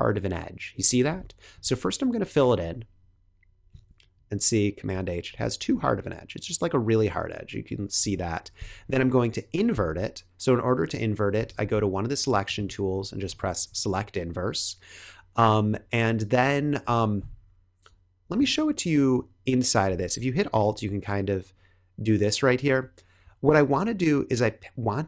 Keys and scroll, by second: 1.0 super+h, 4.1 super+h, 5.2 super+h, 7.9 super+h, 11.3 l, 17.1 b.